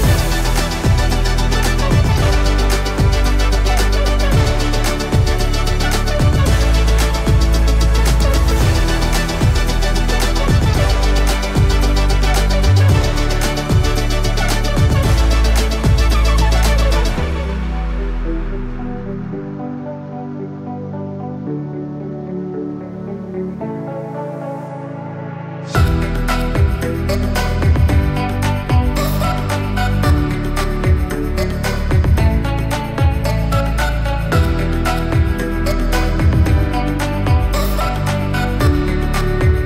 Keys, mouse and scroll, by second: 5.2-7.1 drag, 7.4 right click, 8.3 click, 10.3 Return, 11.0-12.8 typing, 13.4 click, 15.6 ctrl+space, 16.3-17.1 typing, 18.0 click, 23.7-24.2 scroll up 1, 24.2-26.4 middle drag, 26.4 click, 28.3-29.3 scroll down 1, 29.3 middle click, 30.2 click, 32.6 right click, 33.6 click, 36.6 Return, 37.7 shift+b, 38.8 click, 39.2-39.6 typing.